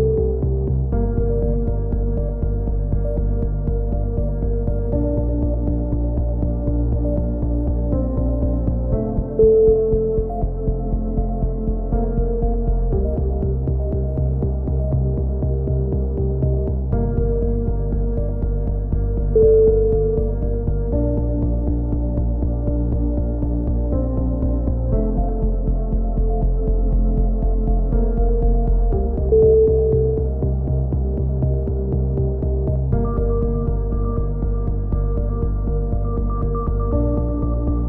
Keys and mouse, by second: 0.6 g, 2.3-3.6 right drag, 4.2-6.0 drag, 6.2 a, 6.6-8.2 middle drag, 9.6 middle click, 9.9-11.2 drag, 11.2 middle click, 12.8 ctrl+r, 13.8 a, 15.2-17.9 drag, 18.9 g, 20.0 click, 20.3 g, 22.1 ctrl+z, 22.6 g, 23.9 click, 27.8 a, 29.2-31.9 middle drag, 31.9-32.9 drag, 33.1 a, 33.3-34.8 middle drag, 34.8-36.2 drag, 35.9 f, 36.3 a, 36.6 click, 37.5-37.8 middle drag.